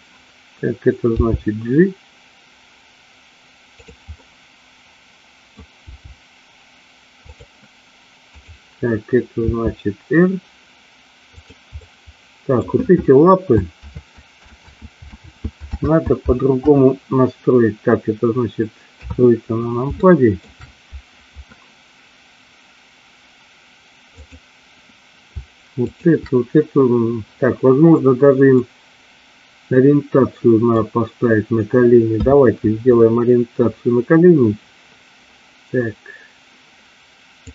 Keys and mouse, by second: 1.2 g, 4.2-5.6 middle drag, 6.0 g, 8.5 click, 9.5 r, 11.9 middle click, 14.1 ctrl+z, 14.8 ctrl+z, 15.4 ctrl+z, 16.0 ctrl+z, 19.0 KP_3, 20.0 shift+middle click, 24.3 click, 25.9 shift+click, 28.8-30.9 middle drag, 32.3 KP_3.